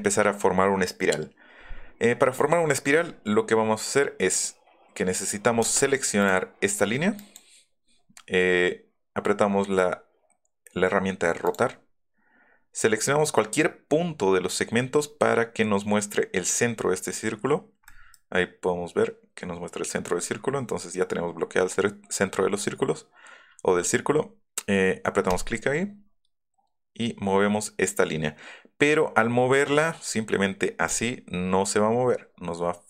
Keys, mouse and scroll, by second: 5.5 space, 6.2 click, 7.2 click, 11.4 click, 17.5 middle click, 18.1 middle click, 25.3 click, 30.9 click.